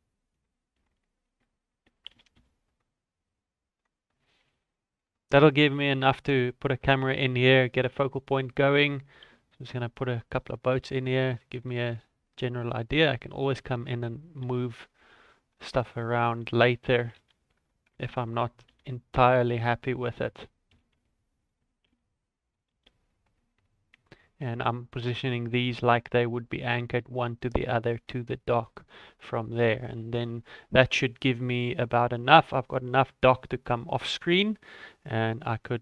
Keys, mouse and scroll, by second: 0.4 shift+click, 2.1 shift+d, 4.0 scroll down 2, 4.2 shift+middle click, 5.7 right click, 7.1 shift+middle click, 8.0 click, 8.5 shift+middle click, 9.2 shift+d, 10.7 r, 11.9 g, 13.6 shift+d, 14.4 r, 16.9 r, 18.7 g, 20.7 g, 21.9 shift+d, 22.7 r, 24.7 scroll up 1, 28.7 shift+middle click, 29.0-29.4 scroll down 2, 29.4 middle click, 30.3-30.9 scroll up 4, 30.9 middle click, 31.3 shift+middle click, 31.8 middle click, 32.5 shift+middle click, 34.0 middle click, 34.4 shift+middle click, 34.8 scroll up 1.